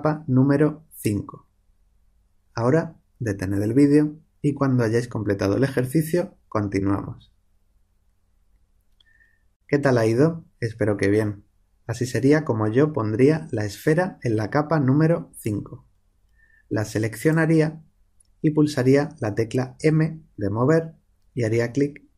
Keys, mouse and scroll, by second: 17.1-18.7 right drag, 18.7 click, 19.7 m.